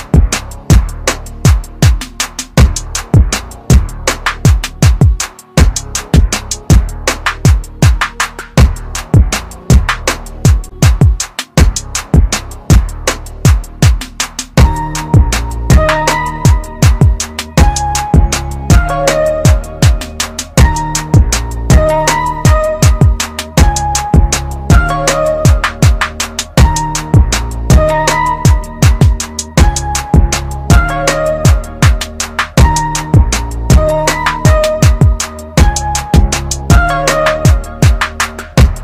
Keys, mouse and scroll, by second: 0.4 [, 2.4 click, 5.0 KP_1, 6.7 click, 19.1-19.6 typing, 20.0 click, 23.7 scroll up 1, 24.3 typing, 24.9 click, 31.6 typing, 32.5 click, 33.6 scroll down 1, 33.7 scroll up 1, 33.8-34.6 scroll down 1, 35.1 click.